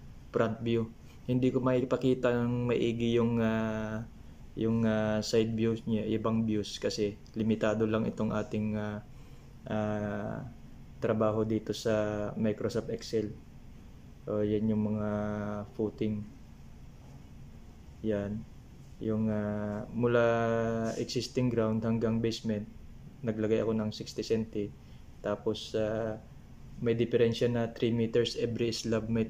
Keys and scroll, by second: 14.3 Down.